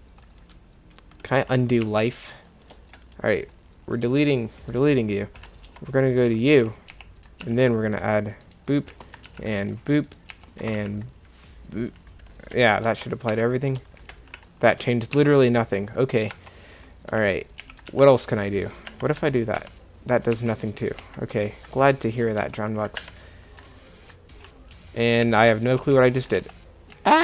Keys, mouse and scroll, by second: 1.9 2, 4.2 Delete, 5.7 Tab, 6.3 a, 6.6 a, 6.9 a, 7.4 ctrl+r, 8.9 a, 9.3 ctrl+r, 10.3 a, 10.7 ctrl+r, 12.9 Tab, 13.3 1, 15.2 2, 16.3 Tab, 17.1 a, 17.6 a, 17.9 ctrl+r, 19.2 Tab, 19.6 1, 20.3 2, 21.0 ctrl+z, 22.4 ctrl+t, 24.7 Tab, 25.2 1, 25.5 2, 25.8 1, 26.4 ctrl+z, 27.0 ctrl+z.